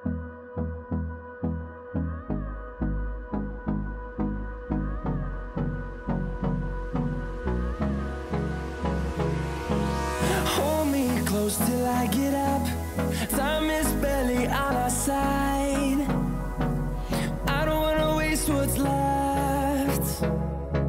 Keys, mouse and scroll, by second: 5.2-6.0 scroll down 1, 6.0 scroll up 1, 6.8 click, 9.5-11.4 drag, 15.5 click.